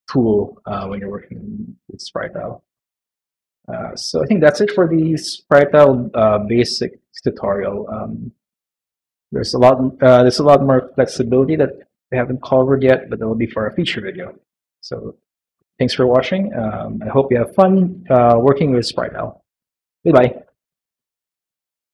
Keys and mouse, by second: 0.6 middle click, 1.7 middle click, 2.7 middle click, 9.1 middle click, 10.8 middle click.